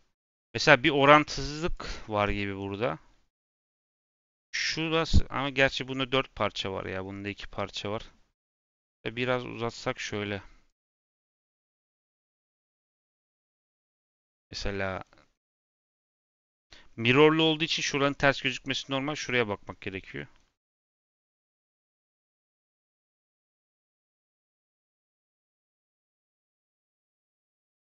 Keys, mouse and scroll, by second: 2.2 scroll down 1, 2.3-18.3 middle drag, 18.3-18.7 scroll up 1, 18.7-20.4 middle drag, 20.4-22.3 scroll up 1, 22.3-23.4 scroll up 1, 23.5-24.4 scroll down 2, 24.4-25.9 middle drag, 25.9-26.6 scroll up 2, 26.6 middle click, 27.4-27.9 scroll up 1.